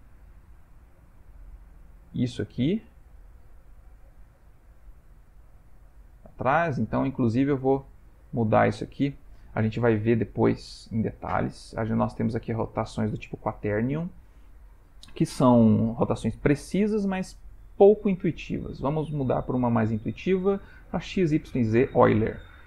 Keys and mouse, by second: 7.9 click, 18.4 click.